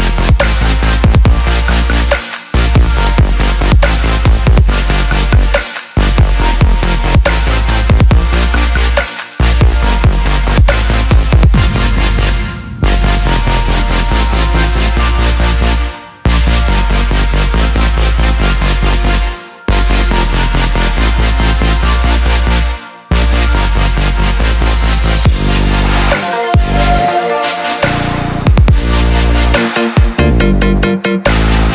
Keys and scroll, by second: 15.4 ctrl+s.